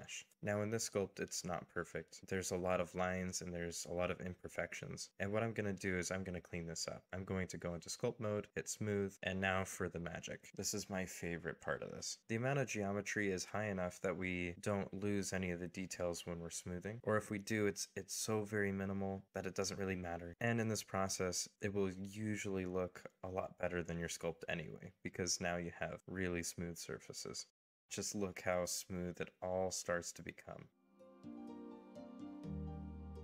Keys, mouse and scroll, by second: 2.4 shift+middle click, 3.0 shift+middle click, 4.3 scroll up 1, 5.1-5.7 scroll down 1, 7.0 scroll up 1, 10.7 double click, 18.3-19.4 typing, 22.3-23.8 scroll up 1, 24.9 ., 25.0 2, 25.3 Return, 27.7 middle click, 29.1 middle click, 30.2 scroll up 1, 30.5 middle click, 31.2 scroll down 1, 31.5 middle click, 33.1 scroll.